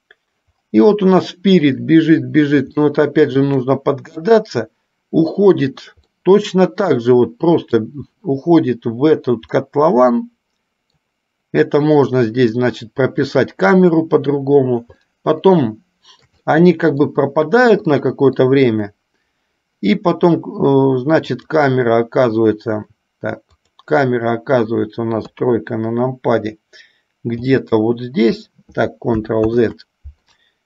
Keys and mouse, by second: 3.1 shift+middle click, 6.3-7.8 middle drag, 9.8-11.3 middle drag, 15.2-16.6 shift+middle drag, 16.7 middle click, 18.1 middle click, 21.5 click, 23.6 click, 25.5 KP_3, 27.6 g, 29.7 ctrl+z.